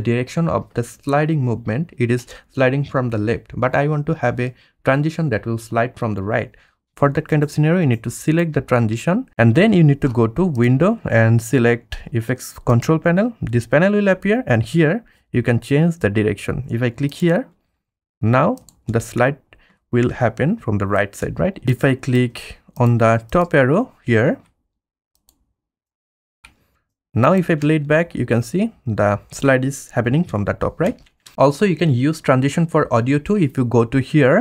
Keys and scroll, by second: 18.9 space, 24.2 F1, 26.8 F1, 27.6 space, 30.3 space, 30.8 space.